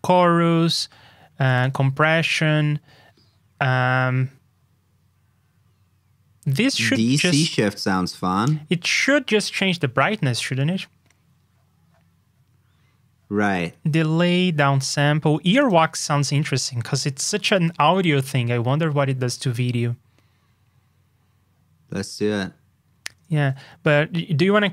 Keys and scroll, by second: 23.4 super+Tab.